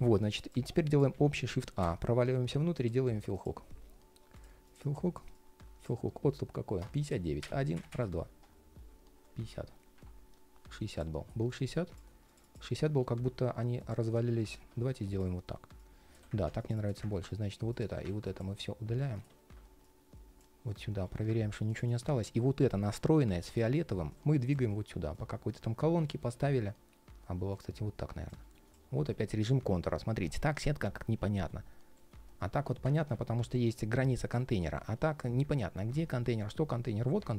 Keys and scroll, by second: 20.4 ctrl+shift+3, 22.6 ctrl+shift+3, 23.2 ctrl+shift+3, 24.4 ctrl+shift+4, 25.9 ctrl+shift+3, 28.2 ctrl+shift+3, 29.7 ctrl+shift+4, 30.0 ctrl+shift+4, 30.7 ctrl+shift+4, 31.1 ctrl+shift+3, 31.9 ctrl+shift+3, 32.1 ctrl+shift+3, 34.1 ctrl+shift+3, 36.0 ctrl+shift+3.